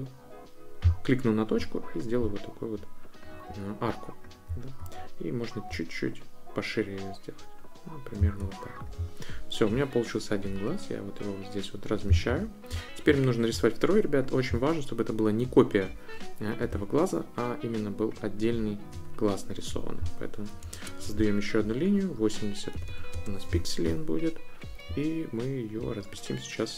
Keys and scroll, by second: 20.7 Return, 22.5-23.4 typing.